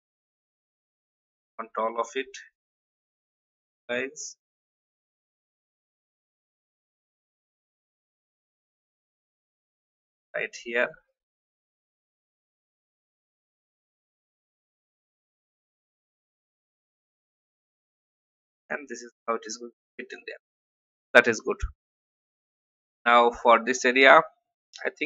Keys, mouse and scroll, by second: 2.5 shift+click, 4.4 shift+click, 6.1 ctrl+g, 7.0-8.9 alt+drag, 10.1 shift+click, 12.5 shift+Right, 12.7 shift+Right, 13.3 shift+Up, 13.6 shift+Up, 13.7 shift+Up, 18.2-25.0 drag.